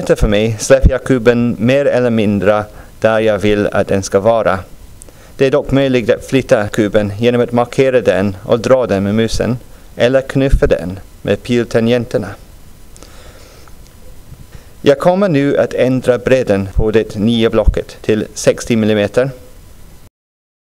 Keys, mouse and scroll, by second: 18.2-20.7 drag.